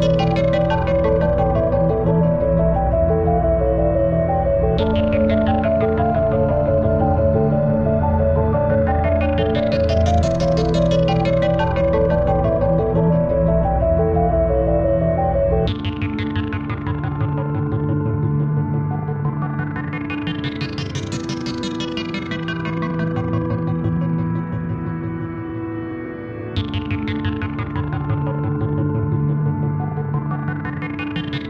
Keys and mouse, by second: 0.4 click, 0.6 click, 0.6 typing, 2.6 click, 2.6 typing, 3.8 click, 6.2-7.8 drag, 7.1-7.8 typing, 7.8 click, 8.9 click, 8.9 typing, 10.4 click, 12.0 click, 13.8 click, 14.4 typing, 17.2 click, 17.2 typing, 17.8 ctrl+=, 18.5 space, 21.0 click, 21.4 typing, 23.0 click, 23.0 typing, 25.0 click, 25.0 typing, 29.1 click, 29.1 typing.